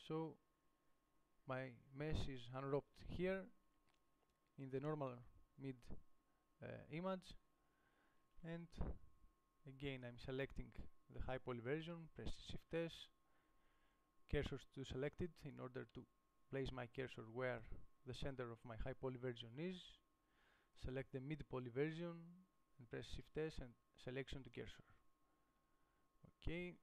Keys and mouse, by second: 9.4 Tab, 16.2-21.0 middle drag, 24.8 shift+s.